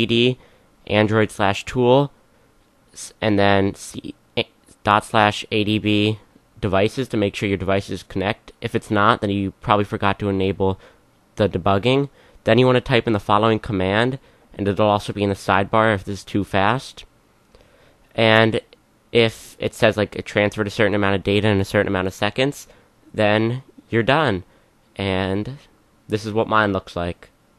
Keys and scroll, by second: 0.0-0.9 typing, 4.8-15.2 typing, 22.6-25.4 typing.